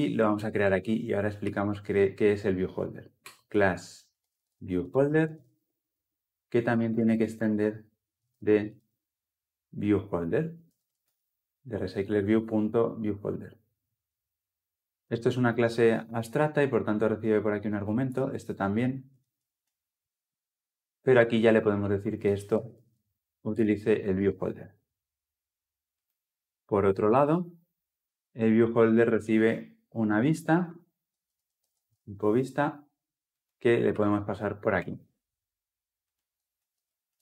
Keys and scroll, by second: 3.0 Return, 10.9 Return, 14.8 ctrl+p, 24.0 Return, 34.6 Return, 36.3 Return.